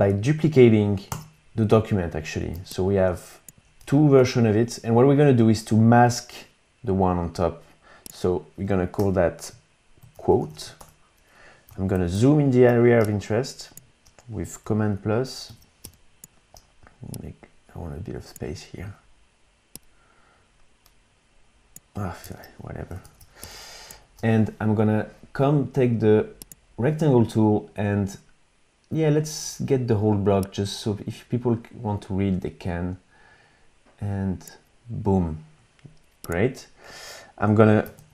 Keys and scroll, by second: 1.1 super+d, 2.5 v, 4.2 super+z, 9.0 Return, 9.8-11.0 typing, 11.9 super+=, 12.1 super+=, 13.0 space, 15.5 super+=, 15.8 space, 23.0 super+-, 23.4 space, 37.9 super+-.